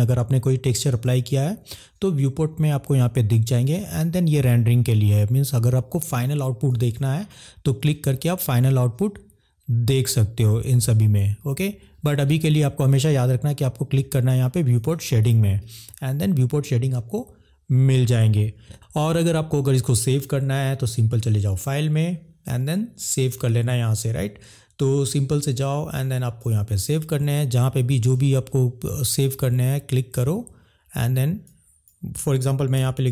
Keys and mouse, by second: 6.7 click, 14.7 click, 15.5 middle click, 21.5-26.7 drag.